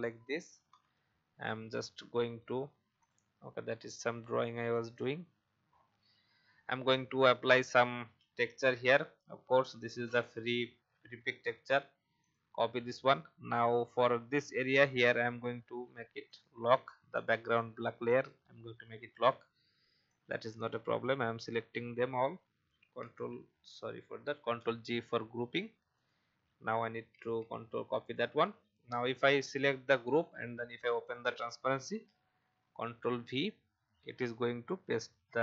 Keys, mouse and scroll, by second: 0.7 ctrl+o, 3.0-11.2 drag, 10.6 v, 11.4 ctrl+c, 12.2 click, 14.8-16.3 scroll down 1, 16.3-21.3 drag, 23.0 ctrl+c, 24.3 g, 25.9 click, 27.1 ctrl+c, 28.0 click, 32.6 ctrl+v.